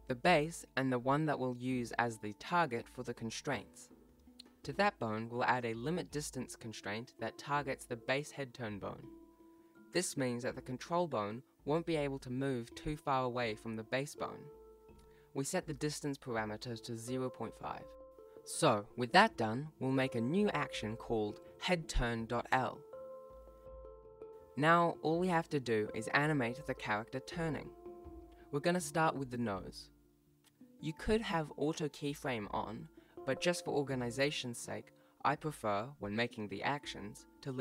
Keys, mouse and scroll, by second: 0.1 ctrl+z, 0.1 right click, 0.2 right click, 0.4 click, 0.5 click, 2.0 Delete, 2.6 BackSpace, 3.2 ctrl+s, 3.4 right click, 3.6 e, 4.1 right click, 4.3 click, 4.5 BackSpace, 4.6 BackSpace, 5.0 shift+right click, 5.1 ctrl+p, 5.4 ctrl+s, 5.5 ctrl+Tab, 5.6 right click, 5.8 right click, 5.9 ctrl+z, 6.6 ctrl+s, 8.9 right click, 9.6 click, 10.2 click, 10.7 click, 11.1 click, 11.7 Down, 11.9 ctrl+s, 12.1 click, 12.1 click, 12.8 click, 13.0-13.4 click, 13.2 click, 13.6 right click, 14.1 alt+g, 14.3 ctrl+s, 14.4 right click, 14.7 ., 14.9 ctrl+s, 14.9 right click, 16.5 alt+g, 16.8 ctrl+s, 16.9 scroll down 1, 17.1 shift+middle click, 17.3 scroll up 1, 17.4 scroll down 2, 17.7 ctrl+Tab, 17.9 alt+a, 18.0 scroll down 2, 18.3 scroll up 4, 18.5 ctrl+s, 18.7 ctrl+Tab, 19.1 scroll down 1, 20.4 alt+a, 20.6 ctrl+s, 22.3 click, 23.2 click, 23.4 click, 26.2 ctrl+middle click, 26.6 right click, 26.6-26.9 scroll up 1, 26.9-29.4 typing, 27.0 click, 27.6 scroll up 1, 28.7 click, 29.2 click, 29.7 click, 30.5 i, 30.5 r, 30.7 i, 30.9 click, 31.8 click, 31.9 click, 32.1 right click, 32.3 shift+right click, 32.5 a, 32.5 x, 32.7 click, 33.3 click, 34.1 right click, 34.2 i, 34.8 click, 34.9 r, 35.4 i, 35.7 click, 36.6 ctrl+s, 36.6 click, 37.3 right click, 37.5 right click.